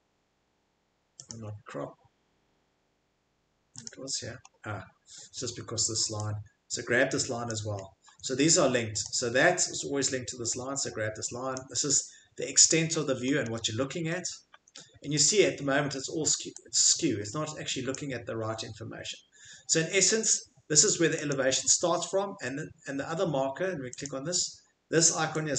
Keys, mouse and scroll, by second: 1.3 click, 1.3 scroll, 2.6-3.3 scroll, 3.8 click, 3.8 scroll, 4.4 scroll, 7.4 click, 7.8 middle click, 7.8 middle click, 8.0 middle click, 8.1 Escape, 9.1 click, 11.5 click, 11.9 middle click, 11.9 middle click, 12.9 scroll, 13.3-15.2 middle click, 13.4 scroll, 14.5 Escape, 15.2 click, 17.9 click, 20.1 middle click, 20.5 middle click, 21.3 click, 22.0 middle click, 22.2 Escape, 24.0 click.